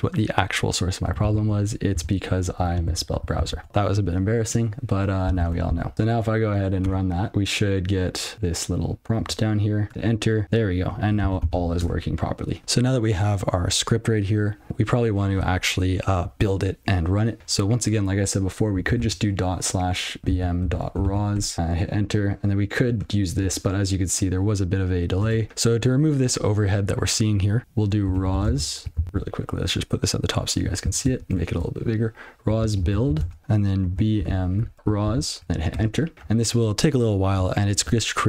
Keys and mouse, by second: 1.0 BackSpace, 1.7 ctrl+f, 1.9 s, 2.9 shift+s, 3.5 ctrl+s, 5.9 Return, 6.1 alt+p, 9.2 click, 10.0 Return, 11.8 Return, 19.0 /, 20.3-21.8 typing, 22.8 click, 23.4 click, 23.5 click, 27.9-28.8 typing, 29.1 ctrl+l, 31.2 ctrl++, 32.4-34.7 typing, 35.0 ctrl+f, 36.7 Return.